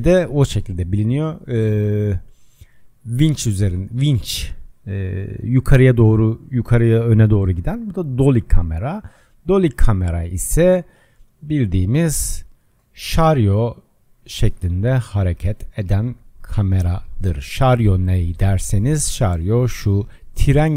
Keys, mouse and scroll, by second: 9.6-12.2 middle drag, 12.2 click, 16.3-18.4 drag, 18.4-20.2 shift+middle drag, 20.2 click.